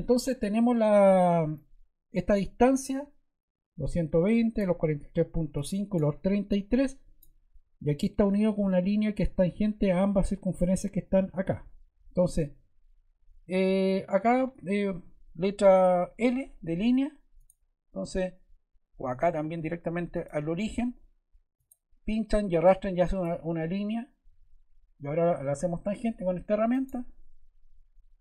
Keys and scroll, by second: 16.1 l, 24.3 Escape.